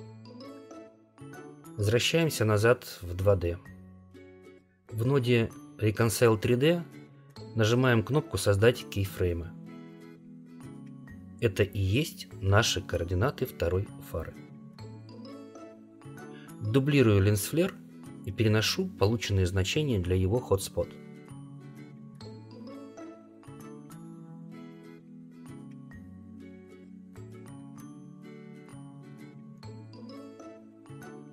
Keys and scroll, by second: 20.1 ctrl+c, 21.8 ctrl+v.